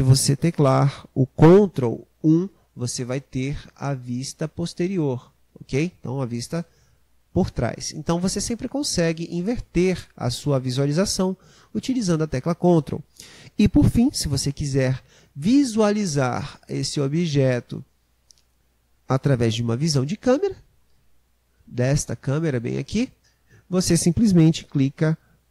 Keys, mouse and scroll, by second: 2.3 ctrl+KP_1, 23.0 click.